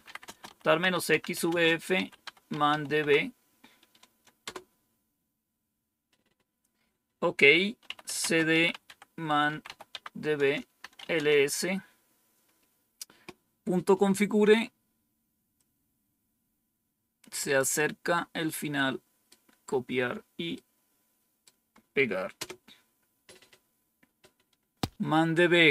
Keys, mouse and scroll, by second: 0.0-3.1 typing, 7.5-11.2 typing, 10.3 Return, 15.5-17.5 drag, 18.0-19.2 right drag, 20.4 right click, 22.3 Return.